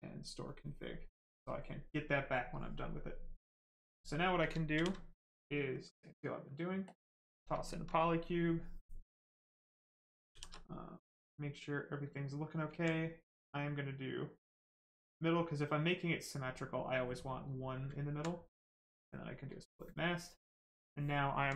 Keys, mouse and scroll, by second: 3.0 right click, 4.7 shift+f, 5.7 click, 7.9 right click, 10.3 shift+f, 10.7 right click, 12.7 alt+right click, 14.0 click, 17.2 right click, 17.9 alt+right click, 19.5 click, 20.0 alt+right click.